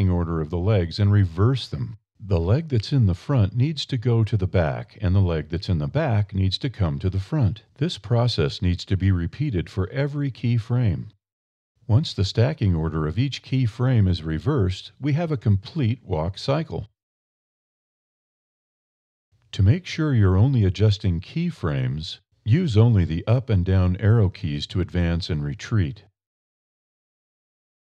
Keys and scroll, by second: 2.7 1, 5.4 1, 9.4 1, 12.0 1, 14.4 Up, 15.6 1, 18.3 1, 20.4 Up, 21.7 1, 24.3 1, 26.6 Up.